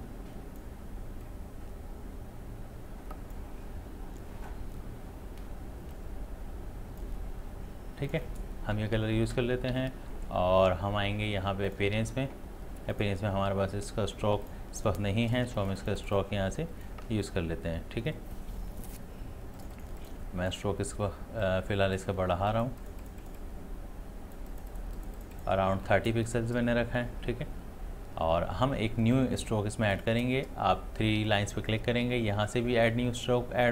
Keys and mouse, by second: 5.9-8.1 drag, 11.7-24.5 drag.